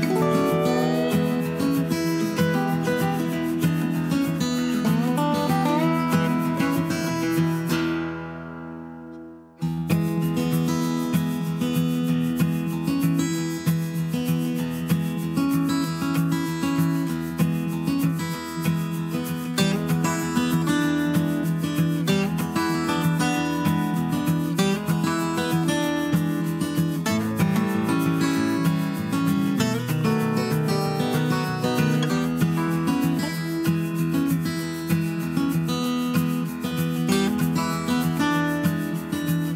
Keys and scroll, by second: 5.2 BackSpace, 7.5 BackSpace, 30.1 Right, 30.2 Right.